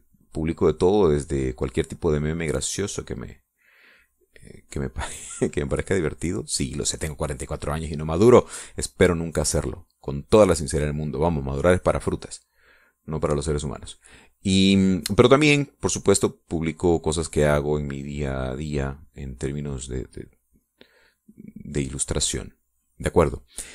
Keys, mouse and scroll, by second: 13.6-21.6 drag, 22.1 middle click, 22.8 middle click, 23.6 click.